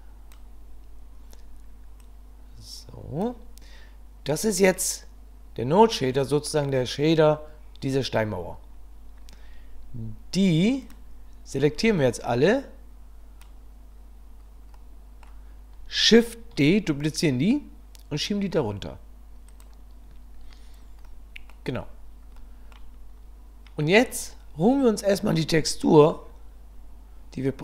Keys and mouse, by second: 2.0-3.3 drag, 10.8 click, 11.7 b, 14.9 middle click, 16.5 shift+d, 21.1 middle click, 22.4 middle click.